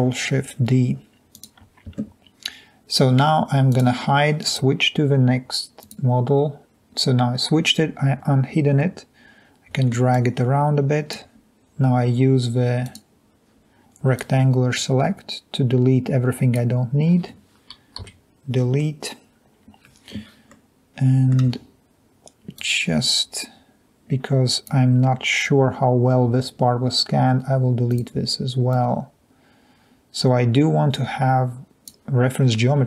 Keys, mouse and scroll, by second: 14.2 click, 18.1 Delete, 29.1-31.9 drag.